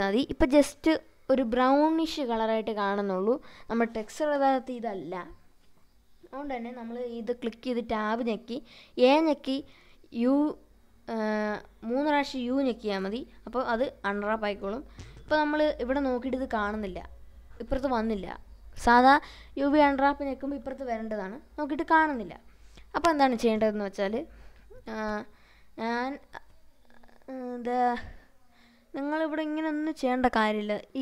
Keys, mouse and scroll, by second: 0.7 ctrl+s, 2.0 middle click, 2.9 scroll up 1, 3.5 scroll up 1, 5.1 Tab, 8.6 u, 8.8 u, 11.3 click, 12.7-16.1 middle drag, 16.4-16.9 scroll up 1, 17.7-22.3 drag, 22.9-24.1 scroll down 1, 24.1-27.4 drag, 28.0-28.6 scroll down 2, 28.6-29.9 middle drag, 30.4 scroll up 1, 30.6 scroll down 1, 30.9 middle click.